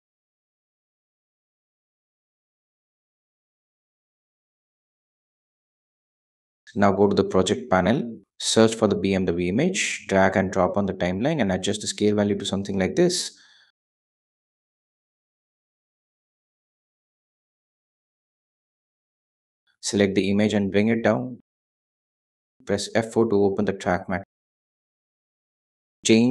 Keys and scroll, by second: 0.5 3, 0.7 Home, 3.2 2, 3.8 ⌅, 22.8 F4.